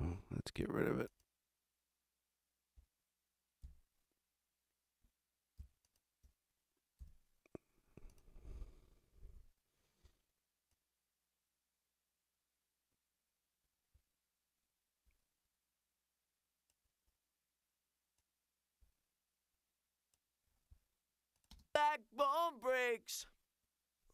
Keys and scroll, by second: 3.6 super+b, 7.0 super+b, 9.3 Delete, 21.5 space.